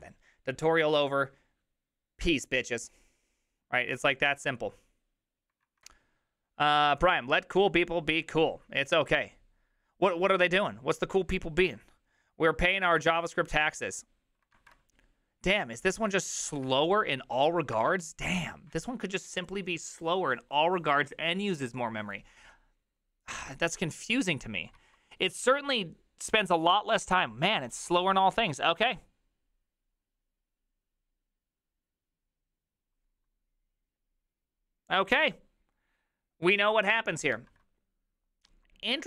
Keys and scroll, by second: 5.7 alt+{, 14.6 alt+{, 16.7 alt+{.